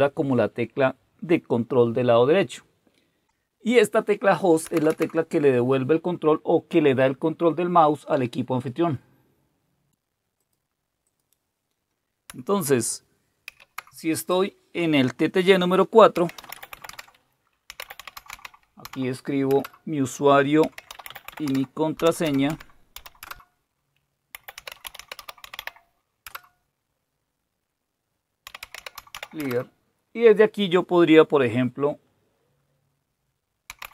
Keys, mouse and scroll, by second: 3.2-4.7 drag, 10.9-13.2 drag, 13.4 ctrl+F4, 15.9-18.8 typing, 19.5 Return, 20.4-27.1 typing, 26.2 Return, 28.2-31.1 typing, 33.5-33.9 typing.